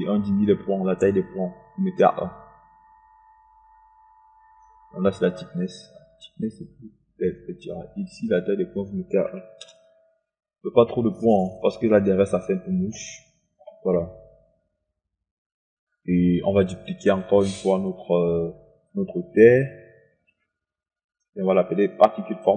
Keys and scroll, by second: 10.3 KP_1, 10.8 Return, 20.5 ctrl+d.